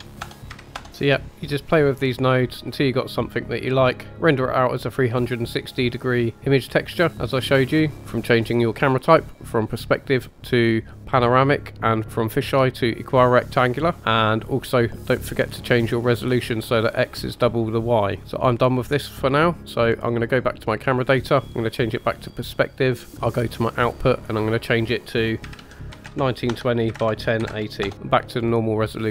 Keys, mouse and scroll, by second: 0.9 middle click, 3.1 middle click, 6.5-7.9 drag, 9.1-10.1 drag, 12.0 click, 12.9-13.9 drag, 14.7 click, 21.4-22.5 drag, 23.7 click, 24.6-27.9 drag, 28.5-29.1 scroll down 2.